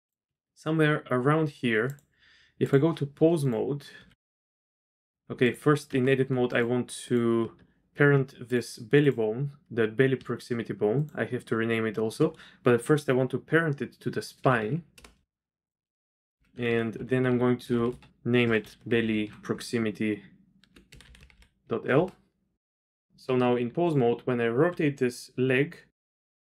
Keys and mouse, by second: 0.3 z, 1.8-2.7 drag, 3.4 click, 4.0 r, 5.4 click, 5.8 Tab, 6.5 shift+click, 9.0 click, 10.9 shift+click, 14.4 ctrl+p, 16.0 F2, 16.6 Left, 17.1 Right, 17.2 Right, 17.7 BackSpace, 17.8 BackSpace, 19.0 l, 21.0 BackSpace, 21.1 BackSpace, 23.2 Tab, 24.7 r.